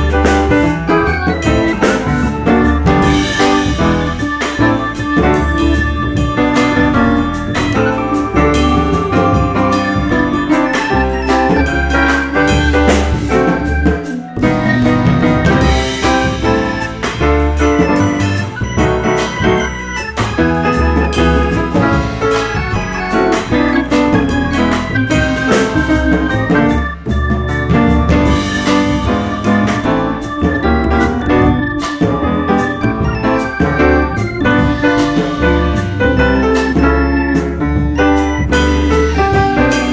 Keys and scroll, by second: 2.7 F4, 5.5 F4, 6.2 F4, 6.6 w, 7.4 F4, 9.2 F4, 11.1 4, 11.3 F4, 12.7 7, 13.6 F4, 14.3 F4, 15.9 2, 16.3 F4, 17.8 F3, 18.3 F3, 21.6 F3, 24.8 F4, 26.9 F4, 32.5 ctrl+z, 33.6 F4, 34.6 F4.